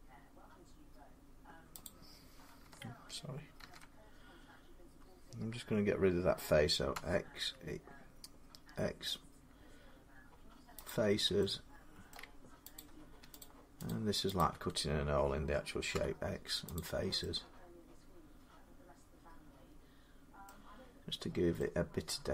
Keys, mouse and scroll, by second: 1.7 click, 3.4 ctrl+z, 6.7 x, 10.7 click, 11.9 middle click, 12.6 click, 13.2 shift+click, 13.8 click, 15.7 click, 15.8 x, 16.6 click, 20.3 middle click, 20.7 scroll up 1, 21.5 scroll down 1.